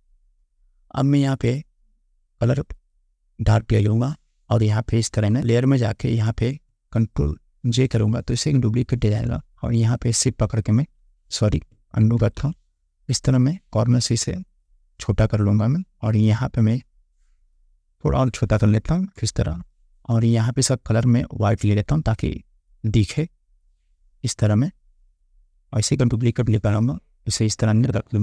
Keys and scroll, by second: 7.8 ctrl+j, 9.1 ctrl+t, 12.3 ctrl+z, 19.3 Return.